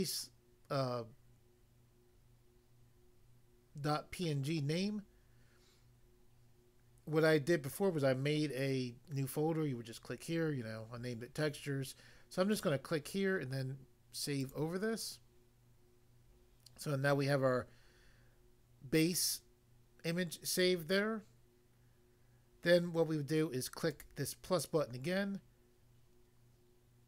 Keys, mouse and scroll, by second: 12.5 click, 12.6 click, 14.4 click, 14.6 click, 23.9 click, 24.0 click.